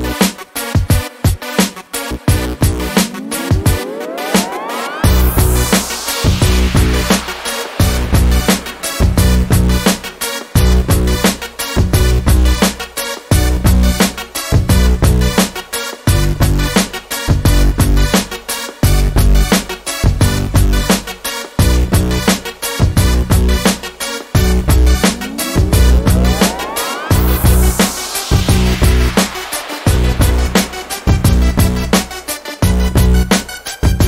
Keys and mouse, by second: 6.4 KP_1, 12.5-16.4 middle drag, 18.2-18.8 drag, 18.8 middle click, 18.9-19.5 middle drag, 23.5-25.8 drag, 25.8-26.4 middle drag, 27.7-28.3 middle drag, 32.3-33.2 middle drag, 33.2 click, 33.7 middle drag.